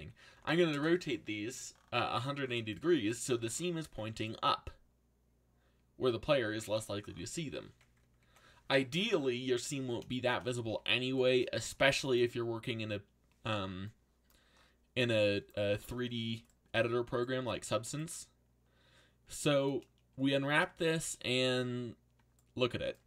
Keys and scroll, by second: 0.0-0.9 typing, 2.1 z, 3.3 alt+a, 10.6 a, 11.6 u.